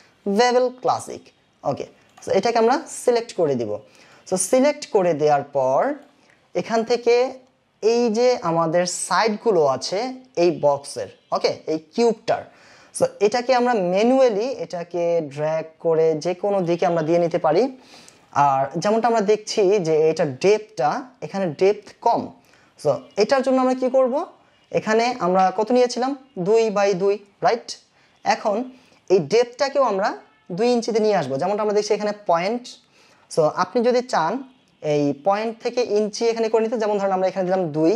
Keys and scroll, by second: 37.6 KP_2.